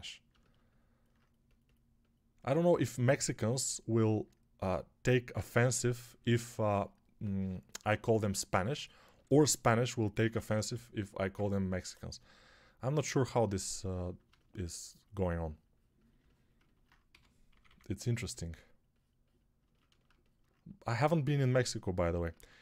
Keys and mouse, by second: 7.6 6, 10.6 [, 11.1 [, 11.1 [, 11.2 [, 16.9 g, 17.4 [, 17.5 [, 22.3 ctrl+r.